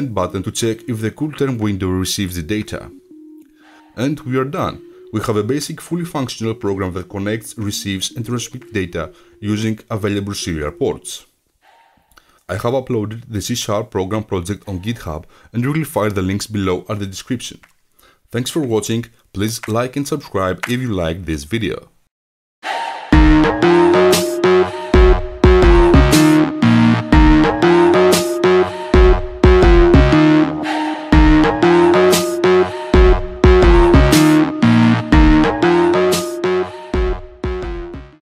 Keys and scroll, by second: 0.0-0.3 typing.